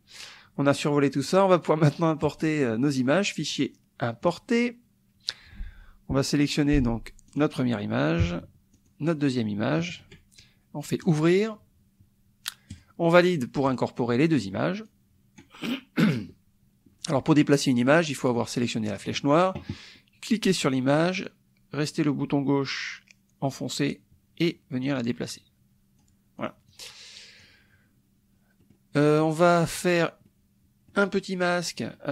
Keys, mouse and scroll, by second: 2.3 click, 4.2 click, 7.3 click, 8.8 shift+click, 11.0 click, 12.7 click, 13.7 click, 14.9 click, 19.0 click, 20.3-25.0 drag, 25.4 click, 26.3 click, 26.7 click, 28.6 scroll down 2, 28.8 click, 29.2 click, 30.3 click, 30.6-31.1 scroll down 2.